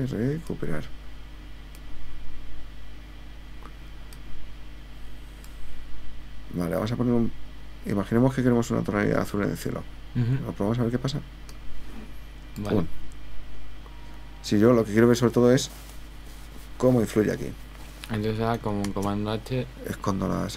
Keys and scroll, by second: 18.9 super+h.